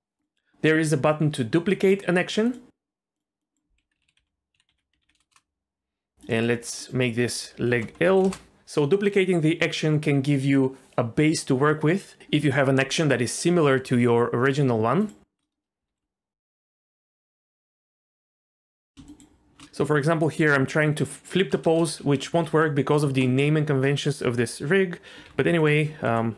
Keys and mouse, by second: 0.2-0.5 drag, 2.6-5.9 drag, 4.0 BackSpace, 5.3 Return, 6.2-8.3 drag, 15.9 ctrl+c, 17.0-18.2 right drag, 18.8 ctrl+z, 19.1 shift+click, 21.5 ctrl+shift+v, 22.3 ctrl+z, 23.2 middle click, 25.1 alt+r, 26.0 KP_1.